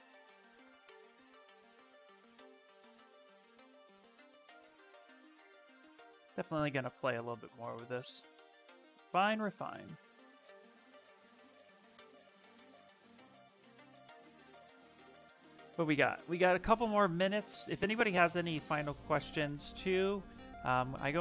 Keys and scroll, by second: 17.1 s.